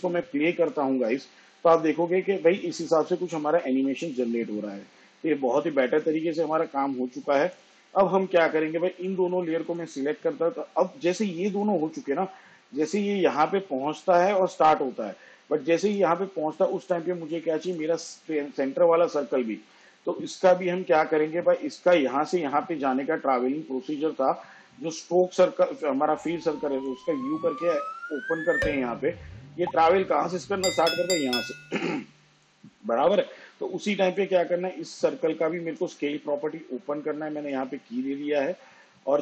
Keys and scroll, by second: 2.9 space, 5.6 space, 29.4 u, 37.6 s.